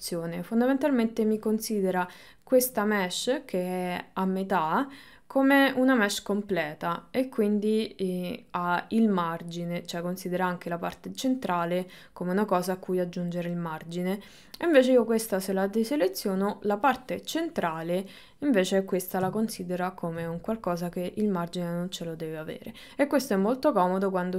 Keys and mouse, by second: 7.6 click, 14.4 click, 19.6 ctrl+middle click.